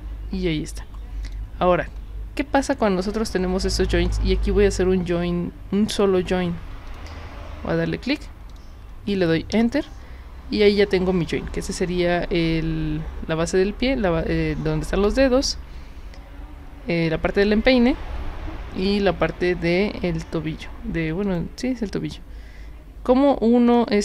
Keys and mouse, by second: 1.2 click, 6.9 click, 8.5 click, 9.5 Return, 10.6 click, 21.2 click, 23.7 click.